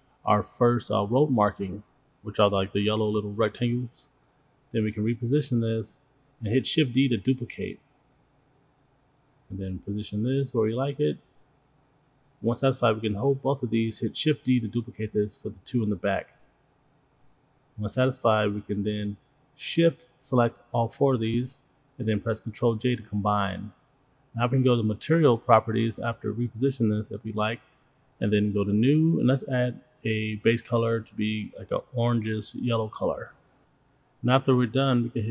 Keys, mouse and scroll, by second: 0.1 middle drag, 0.6 click, 1.2 click, 1.9 g, 3.6 click, 3.7-4.2 middle drag, 4.2-4.7 drag, 5.2-5.7 drag, 6.8 shift+d, 8.2-10.3 drag, 10.4 middle click, 11.0 click, 11.4 click, 13.0 shift+click, 13.7 shift+d, 14.4-17.2 drag, 18.3 ctrl+click, 18.6 ctrl+click, 18.9-19.3 scroll down 2, 19.3-20.1 scroll up 2, 20.1-21.1 scroll up 5, 20.3 shift+middle drag, 21.1 shift+click, 21.5-21.9 scroll down 4, 23.0 ctrl+j, 24.1 click, 25.2 click, 27.0 click, 28.5 click, 30.8 click.